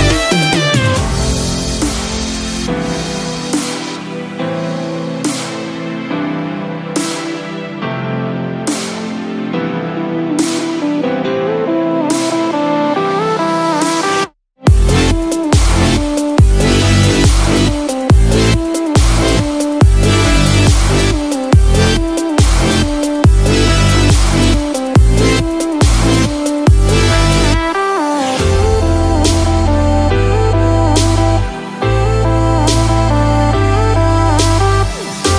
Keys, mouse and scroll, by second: 9.4 Tab, 9.8 click, 14.8 ctrl+r, 14.8 Tab, 15.5 ctrl+r, 19.0 alt+click, 20.8 g, 27.4 KP_Subtract, 27.4 alt+click, 29.3 KP_Add, 30.2 g.